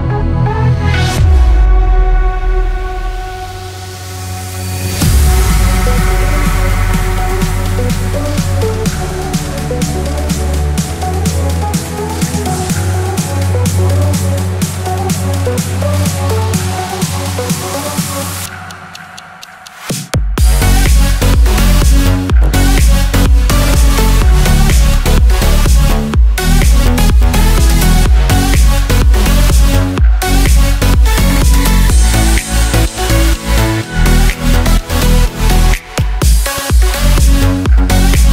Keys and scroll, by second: 8.9 ctrl+z, 15.1 ctrl+z, 23.6 ctrl+z, 38.1 ctrl+j.